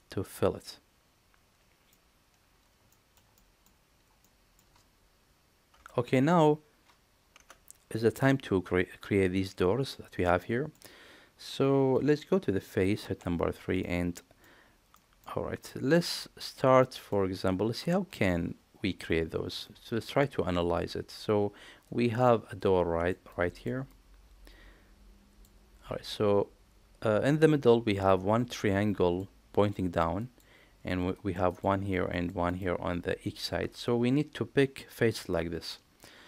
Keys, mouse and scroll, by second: 0.2-1.8 middle drag, 2.8 shift+middle click, 3.3 middle click, 4.2 middle click, 10.3 middle click, 13.0 3, 13.7 middle click, 14.9 middle click, 15.8 middle click, 15.8 typing, 16.7 middle click.